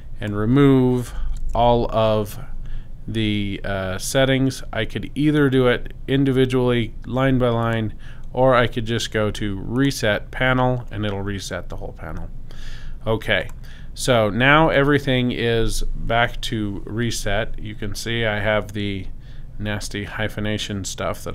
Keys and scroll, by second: 1.1 0, 1.4 Tab, 1.5 0.